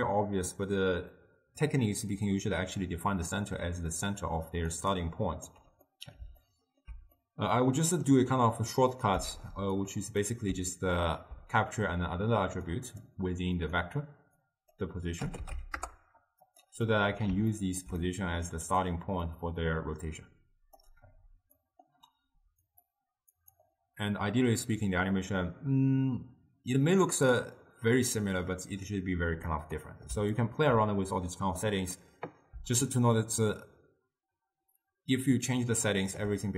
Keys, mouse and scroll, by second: 3.7-5.6 typing, 4.2 click, 5.1 right click, 6.0-7.0 middle drag, 7.0 scroll down 1, 7.2 scroll up 1, 7.2-8.9 middle drag, 8.9 click, 9.4 shift+d, 10.3-12.8 middle drag, 12.8-16.7 drag, 17.0 middle click, 17.6-18.2 scroll down 2, 18.2-19.4 middle drag, 19.4-21.7 drag, 21.7-22.7 middle drag, 22.7-26.5 drag, 27.2-29.6 drag, 29.6-31.7 middle drag, 31.7 click, 32.9-36.0 shift+drag.